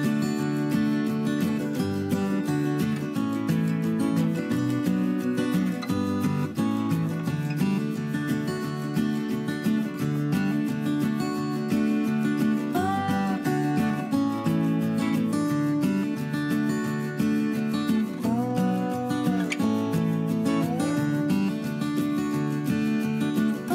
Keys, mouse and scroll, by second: 6.7 F2.